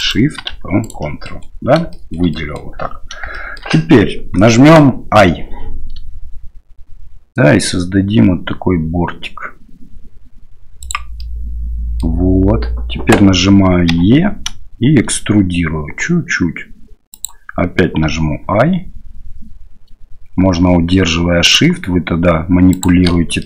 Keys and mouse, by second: 0.0 shift+click, 0.8 ctrl+click, 1.2 middle click, 2.0 click, 2.5 click, 3.4 shift+click, 11.3 click.